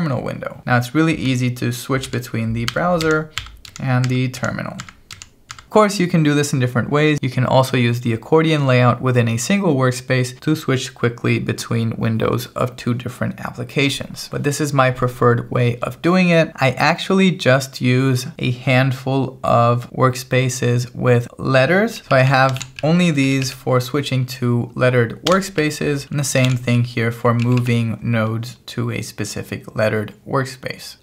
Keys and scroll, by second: 2.1 alt+b, 2.7 alt+t, 3.1 alt+b, 3.4 alt+t, 3.7 alt+b, 4.1 alt+t, 4.4 alt+b, 4.8 alt+t, 5.2 alt+b, 5.5 alt+t, 14.3 0, 21.7-23.5 typing, 25.3 Escape, 25.4-27.5 typing.